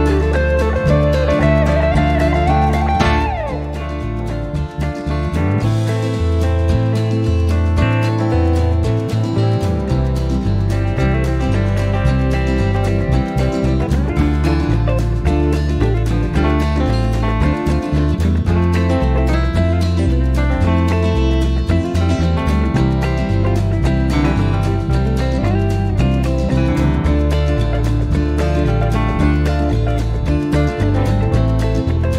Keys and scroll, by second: 1.4 shift+*, 2.7-3.3 typing, 7.0 l, 8.1-9.0 typing, 22.6-26.1 typing.